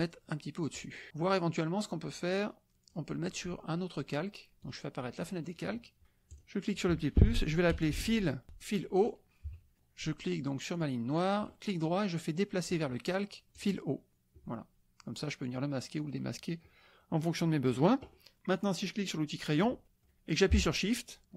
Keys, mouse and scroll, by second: 0.0-0.7 middle drag, 0.7 click, 1.9 click, 4.6-5.0 drag, 5.2 click, 6.3 click, 7.7 f, 7.9 i, 8.4 Return, 9.4 KP_Subtract, 10.7 click, 11.4 right click, 12.7 click, 13.5-13.8 drag, 14.1 click, 15.4 click, 16.0 click, 17.0-18.0 drag, 18.3 click, 19.8 click.